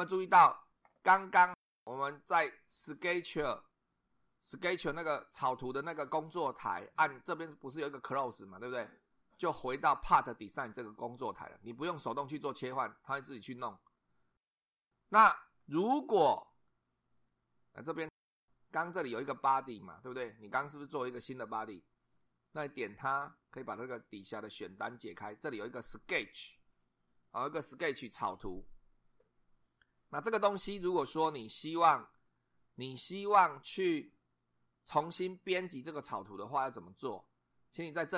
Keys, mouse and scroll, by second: 15.8 click, 18.2 click, 24.1 click.